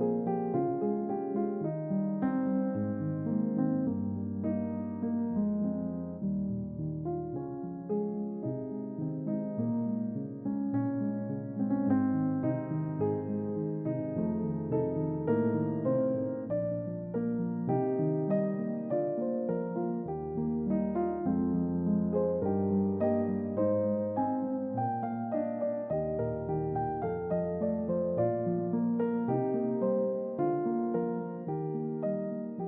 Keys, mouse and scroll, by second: 0.0 middle click, 1.0-1.6 scroll up 2, 1.6 middle click, 2.6 middle click, 2.9 shift+a, 5.7 click, 6.8 click, 8.4-9.3 drag, 11.7 click, 12.9 click, 13.9 ctrl+t, 14.5 click, 15.1 click, 15.8-16.8 drag, 17.0 click, 17.8 click, 19.0 middle click, 20.3 middle click, 22.8 click, 23.4 double click, 23.6 click, 27.2 click, 27.8 click, 28.2 double click, 28.5 click, 28.8 click, 29.3 click, 29.5 click, 29.9 click, 30.3 click, 30.8 click.